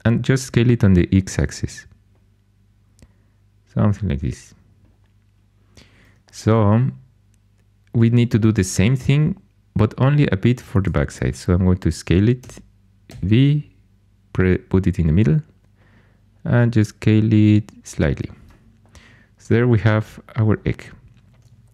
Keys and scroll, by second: 12.4 s, 13.0 v.